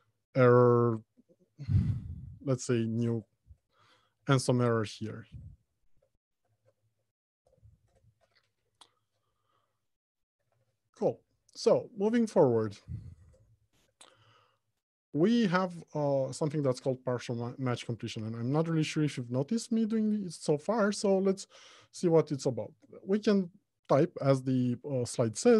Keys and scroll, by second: 3.7 Return, 10.7 alt+Home, 11.2 Left, 12.5 Return.